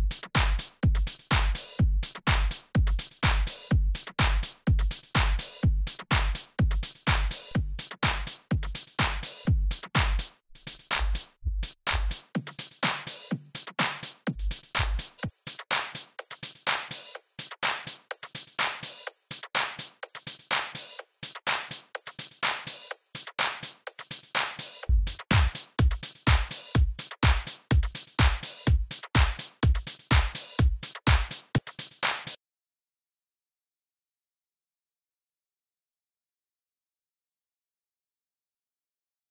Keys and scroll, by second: 2.5 Return, 20.5 Left, 22.2 Down, 22.7 Right, 25.3 Down, 27.7 super+Up, 31.8 super+Right, 32.3 super+Return, 33.9 z, 36.3 z, 37.1 d, 38.5 d, 39.1 super+d, 39.2 super+Left.